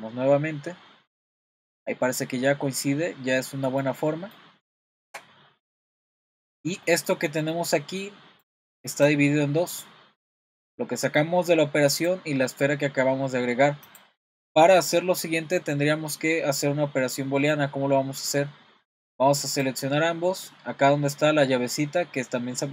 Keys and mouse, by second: 3.4-3.8 middle drag, 4.1 middle click, 4.8-5.2 shift+middle drag, 5.8 click, 6.2-6.7 middle drag, 6.9 middle drag, 8.5 click, 9.0 click, 9.7 click, 10.2 click, 12.0 click, 19.1-19.8 drag.